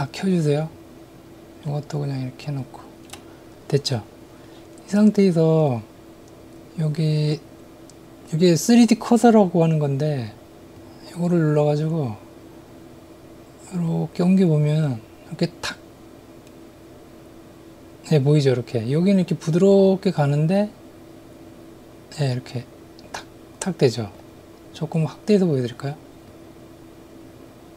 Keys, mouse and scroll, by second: 10.8 click, 13.9-24.1 drag, 26.3-27.7 drag.